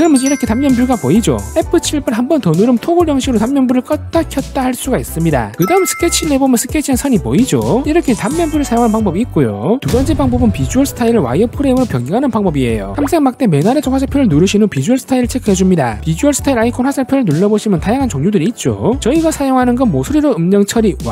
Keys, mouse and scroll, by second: 5.6 1, 6.4 click, 6.8 click, 7.2 click, 7.6 click, 7.9 click, 8.2 click.